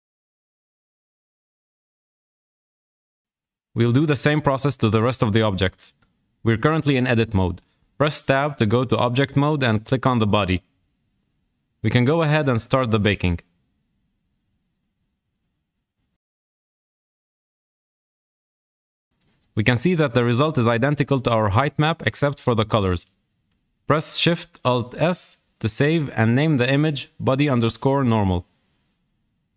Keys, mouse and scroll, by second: 7.3-8.2 scroll down 6, 8.2 shift+middle click, 8.9-10.0 scroll up 6, 10.0 Tab, 10.5 scroll up 2, 10.9-11.8 shift+middle drag, 11.8 click, 15.7 click, 20.6 scroll up 2, 21.2-22.3 shift+middle drag, 22.3-22.8 scroll up 2, 22.8-23.1 scroll down 1, 23.1-24.6 shift+middle drag, 24.6 alt+shift+s.